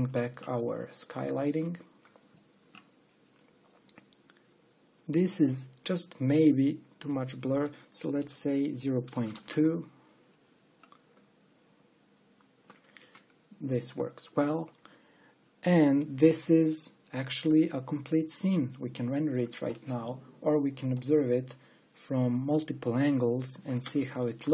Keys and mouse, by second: 0.0 alt+h, 1.3 middle click, 1.9 click, 9.3-10.8 drag, 20.6-22.5 middle drag.